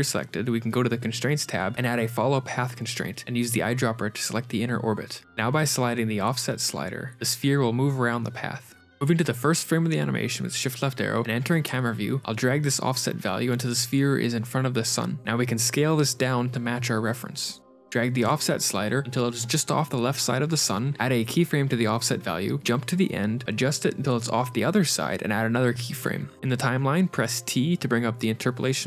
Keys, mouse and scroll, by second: 0.1-0.6 scroll down 3, 0.9 ctrl+space, 1.1 click, 3.5 click, 9.5 KP_0, 10.6 shift+click, 11.0 scroll down 5, 11.0 s, 11.8 shift+click, 12.7 scroll up 3, 12.9 click, 13.9 s, 17.0 shift+middle click, 18.4 shift+click, 21.4 shift+Right, 22.6 shift+click, 24.4 shift+click, 26.4 i, 27.1 t.